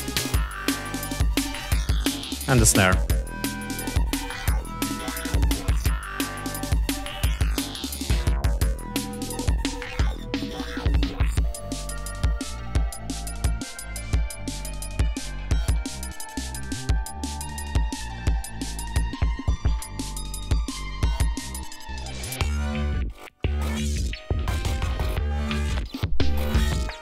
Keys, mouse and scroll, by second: 0.1-0.4 ctrl+scroll up 2, 1.7 ctrl+scroll down 2, 2.7-4.5 drag, 4.9 ctrl+scroll down 2, 6.3 ctrl+scroll up 2, 7.2 ctrl+scroll down 2, 15.3-17.6 ctrl+scroll down 7, 18.7 scroll up 2, 20.0 ctrl+scroll up 2, 23.2 ctrl+scroll down 2.